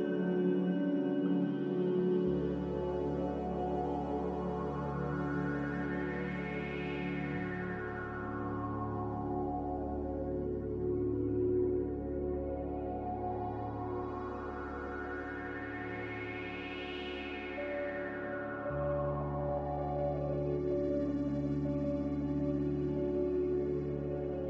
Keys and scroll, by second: 1.9 ctrl+z, 2.6 z, 4.4 Escape, 6.6 typing, 9.3 5, 16.4 z, 19.4 2, 19.6 Return.